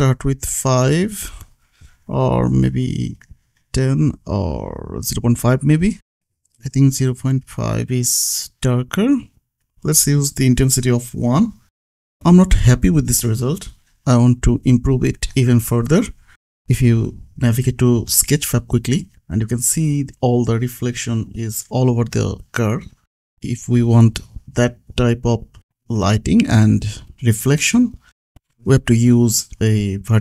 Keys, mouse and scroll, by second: 1.4 Down, 1.6 Right, 2.7 Left, 3.3 shift+Right, 4.1 Right, 4.3 ctrl+s, 4.9 shift+s, 5.1 shift+Left, 6.1 Left, 6.3 KP_5, 6.7 ctrl+s, 7.6 s, 7.8 click, 9.5 Right, 9.8 shift+Left, 10.7 Left, 10.9 ctrl+s, 11.4-12.0 scroll down 1, 12.0 click, 14.3-14.9 scroll up 1, 14.9 click, 16.3-17.3 scroll down 1, 17.3-18.2 scroll up 1, 18.2 click, 18.7 click, 19.7 scroll up 1, 20.4 click, 21.5 click, 22.2 middle click, 22.9-24.9 scroll down 1, 25.0-25.4 scroll down 1, 25.4-26.6 scroll up 1, 26.6-28.5 scroll down 1, 28.7 click, 29.5 scroll up 1, 29.7-30.2 scroll down 1.